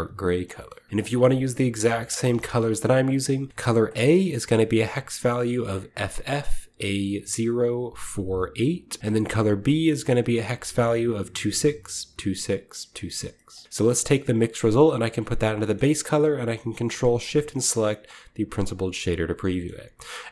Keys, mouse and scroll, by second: 0.9 v, 1.9-2.3 shift+middle drag, 2.0-2.9 shift+scroll up 1, 2.5 middle click, 2.9 scroll down 1, 3.1 middle click, 3.5-4.7 middle drag, 3.8 click, 4.7 click, 9.0-10.5 middle drag, 9.4 click, 10.4 drag, 13.1 scroll down 2, 13.3 middle drag, 13.6 click, 14.3-15.3 drag, 15.5 middle click, 16.9 ctrl+shift+click, 17.4 click, 18.9-19.7 scroll down 1, 19.7-20.3 scroll up 1.